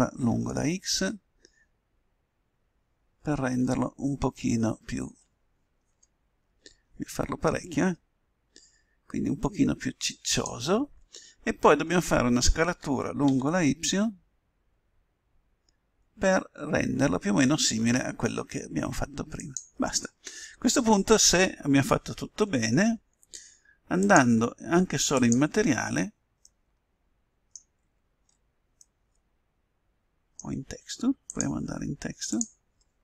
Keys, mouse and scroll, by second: 12.7 s, 23.9-25.7 drag, 26.5 middle click, 30.4 middle click, 31.1 middle click, 31.2 click, 32.3 click.